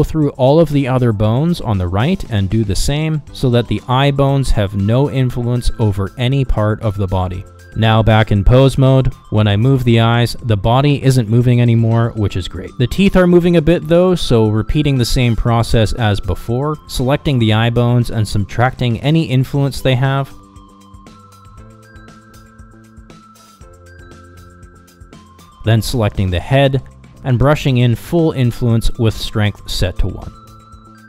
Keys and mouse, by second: 0.7 f, 1.7-4.2 drag, 4.4 middle click, 4.8-5.9 drag, 6.2-7.7 drag, 8.0 KP_Divide, 8.7 ctrl+Tab, 11.0 ctrl+Tab, 12.5 r, 16.4 ctrl+Tab, 17.2 f, 18.3 click, 18.9 middle click, 19.1 click, 19.4 middle click, 19.6 click, 19.9 middle click, 20.0 click, 20.4 middle click, 20.7 click, 20.8 middle click, 21.1 click, 21.4 click, 21.6 middle click, 21.7 click, 22.1 middle click, 22.2 click, 22.5 middle click, 22.7 click, 22.9 middle click, 23.1 middle click, 23.2 click, 23.6 middle click, 23.7 click, 23.9 middle click, 24.1 middle click, 24.8 click, 26.0 Down, 26.2 Down, 28.7 click, 29.4 middle click, 29.6 click, 30.4 middle click, 30.6 click.